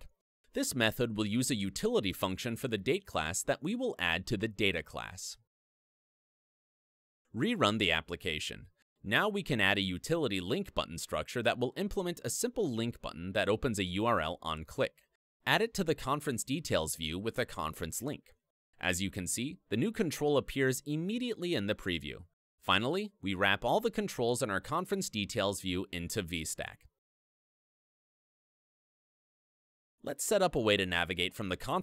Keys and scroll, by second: 1.7 super+e, 4.0 ctrl+Up, 6.2 super+v, 6.9 ctrl+r, 9.3 super+e, 11.4 ctrl+Up, 13.4 super+v, 14.4 super+s, 15.2 ctrl+Down, 16.7 alt+Up, 19.6 Return, 20.3 F2, 23.3 alt+Up, 24.6 alt+super+t, 26.3 Return, 31.5 super+e.